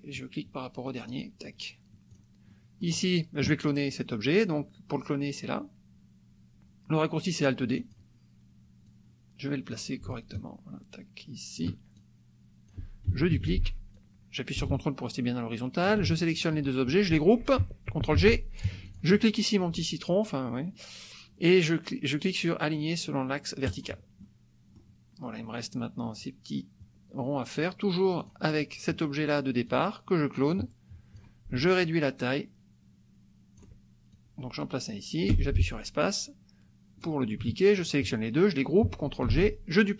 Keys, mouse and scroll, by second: 1.1 click, 2.2 click, 2.5 click, 7.9 click, 8.9-9.9 drag, 10.4-11.8 ctrl+shift+drag, 12.0-13.1 ctrl+shift+drag, 13.4 ctrl+d, 14.0-16.0 drag, 16.4 ctrl+shift+click, 18.1 ctrl+g, 18.6 ctrl+shift+g, 19.0 shift+click, 23.7 click, 24.2 click, 28.3 click, 29.8 click, 30.5 click, 31.8-33.9 ctrl+drag, 34.1-37.2 ctrl+drag, 35.3 space, 37.8 shift+click, 39.3 ctrl+g.